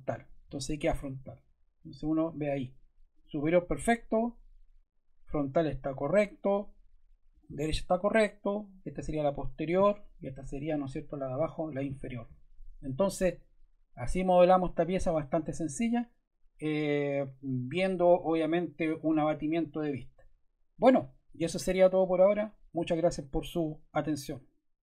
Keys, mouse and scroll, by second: 0.0 click, 3.1 click, 3.3 click, 5.3 click, 5.5 click, 7.2 click, 7.4 click.